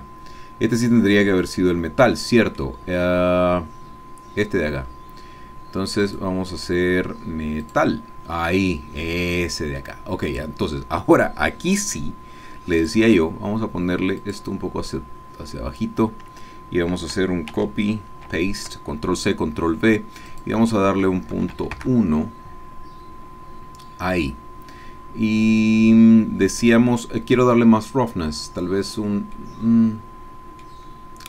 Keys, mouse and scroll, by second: 1.3-2.8 middle drag, 6.0 click, 7.8 click, 8.5-10.6 middle drag, 12.7 click, 14.2 click, 14.9-16.3 drag, 17.6 ctrl+c, 18.3 ctrl+v, 20.3 click, 21.3 KP_Decimal, 21.5 KP_1, 25.6-26.6 middle drag, 29.3 middle click, 30.1 click.